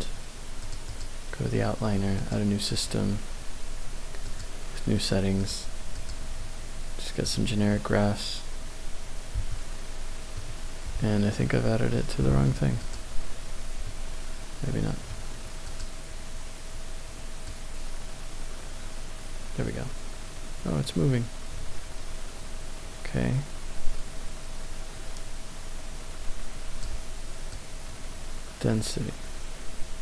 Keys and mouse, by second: 0.6 click, 0.9 click, 2.7 click, 4.3 click, 5.4 click, 6.1-7.5 drag, 9.6-11.3 middle drag, 12.7 click, 15.7 click, 17.5-26.8 drag, 27.5-30.0 drag.